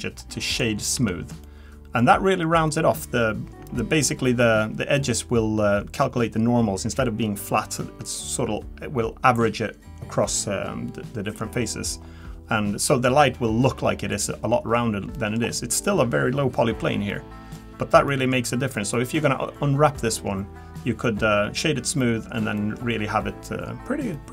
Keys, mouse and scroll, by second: 1.0 Tab, 1.4 middle click, 2.1-2.7 scroll down 3, 2.4 middle click, 3.2-4.1 scroll down 1, 12.0-14.1 scroll up 2, 14.1 click, 14.1 scroll up 1, 15.1 middle click, 17.1 middle click, 17.6-18.6 scroll down 3, 18.1 middle click, 18.6-18.9 scroll down 2, 18.9 middle click, 19.4-20.1 scroll up 2, 20.1-20.7 scroll up 3, 21.0 middle click, 22.0 middle click, 22.6 middle click.